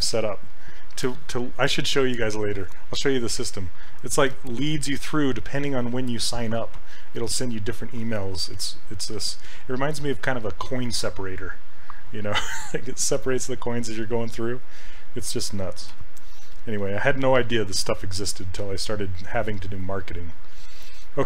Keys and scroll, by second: 16.0 q.